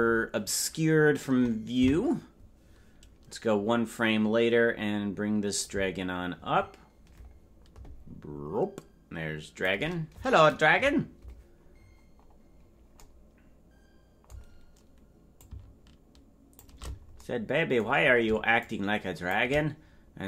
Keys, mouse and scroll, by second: 1.9 Right, 5.6-9.7 shift+drag, 10.8 KP_Decimal, 11.8-12.6 scroll up 5, 12.6 scroll down 4, 12.7 scroll up 1, 15.4-16.7 drag, 18.6 shift+click, 19.7 scroll down 5, 19.8 scroll up 1, 19.9-20.2 scroll down 1.